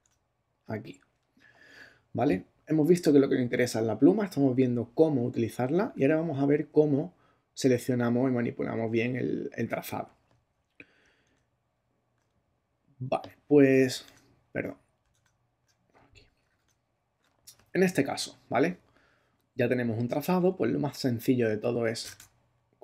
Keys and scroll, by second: 0.0 ctrl+Tab, 11.2 super+Tab, 14.0 alt+super+Tab, 14.8 super+Tab, 16.5 ctrl+super+Tab.